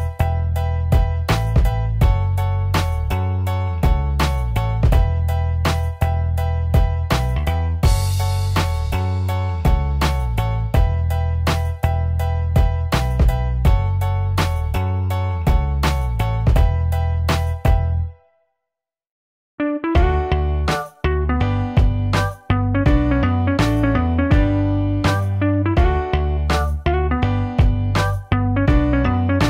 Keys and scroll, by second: 29.0 ctrl+u.